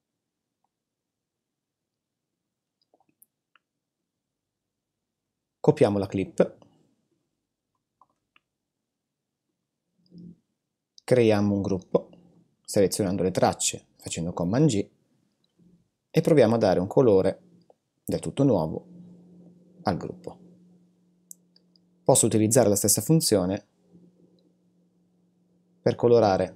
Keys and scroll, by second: 5.8 super+c, 8.0 super+v.